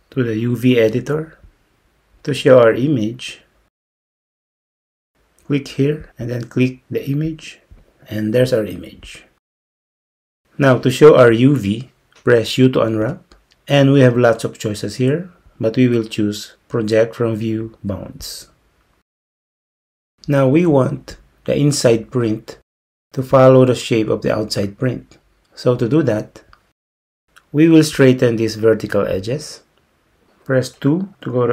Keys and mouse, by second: 6.1-7.4 drag, 13.1 u.